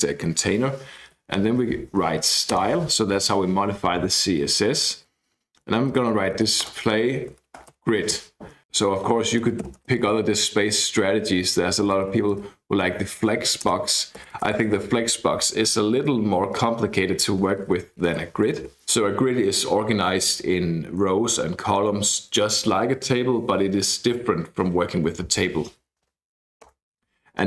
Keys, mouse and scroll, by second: 0.8-1.7 typing, 2.5 Return, 5.7-9.8 typing, 11.5-12.5 typing, 13.7 Return, 14.2 BackSpace, 14.4 BackSpace, 14.6 BackSpace, 14.7 BackSpace, 17.7-19.1 typing, 26.7 Return.